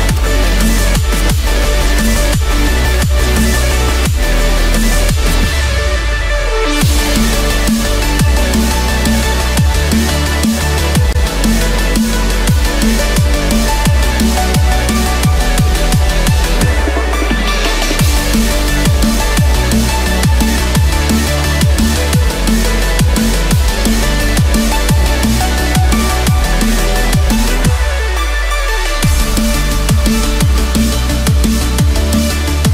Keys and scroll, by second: 7.7 ctrl+z, 13.0 ctrl+z, 27.0 ctrl+z.